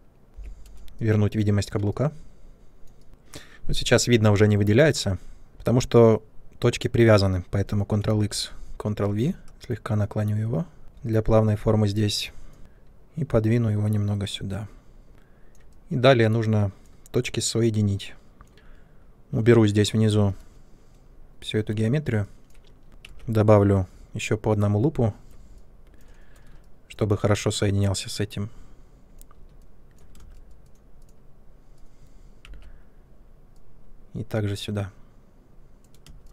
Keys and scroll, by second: 5.5 ctrl+z, 8.1 ctrl+x, 9.4 e, 15.1 ctrl+space, 20.0 space, 21.2 Delete, 23.0 alt+c, 30.1 space, 32.4 alt+c, 36.0 space.